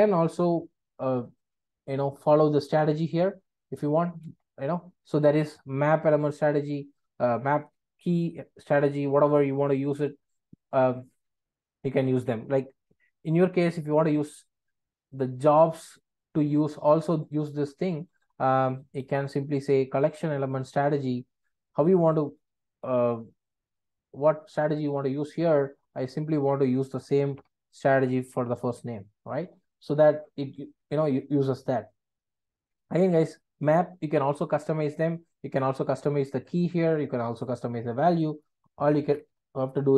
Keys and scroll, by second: 4.3 ctrl+space, 19.1 ctrl+space, 27.3 super+c.